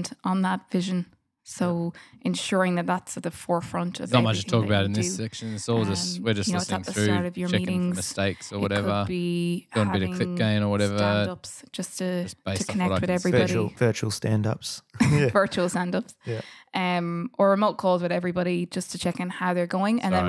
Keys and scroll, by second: 0.1 super+Tab, 0.2 super+Tab, 0.6 super+Tab, 3.1 super+], 5.4 F8.